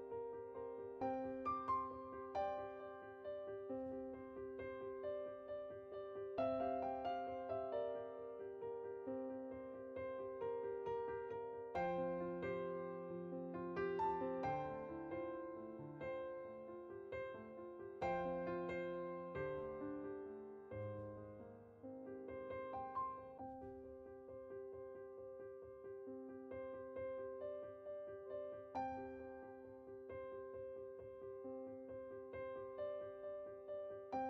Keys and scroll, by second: 1.4-2.4 typing, 7.1-7.9 typing, 9.6-10.5 typing, 17.1 typing, 21.5 0.